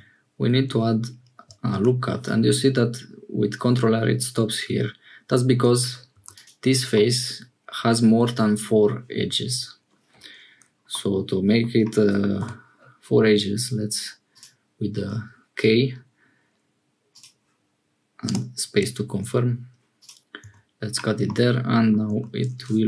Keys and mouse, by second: 1.7 ctrl+r, 6.1 3, 6.3-8.0 drag, 10.9 click, 12.4 k, 20.4 Tab, 21.2 middle click, 22.0 Tab.